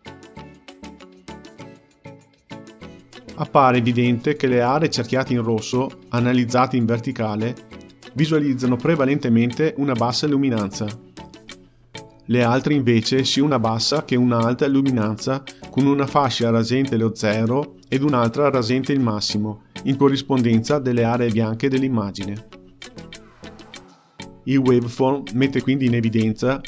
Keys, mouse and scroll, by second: 25.7 shift+a.